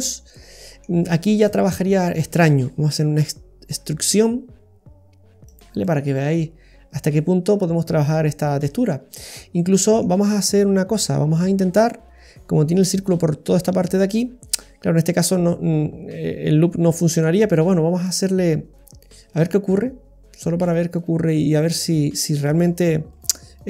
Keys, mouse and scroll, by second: 0.0 scroll down 1, 0.3 middle click, 1.4 shift+middle click, 3.3 e, 5.8 typing, 5.8 middle click, 9.6 middle click, 10.3 middle click, 11.2-11.8 scroll up 4, 18.1 click, 18.8 right click, 19.3 shift+right click, 19.6-22.1 shift+right click, 22.5 shift+right click, 23.4 shift+right click.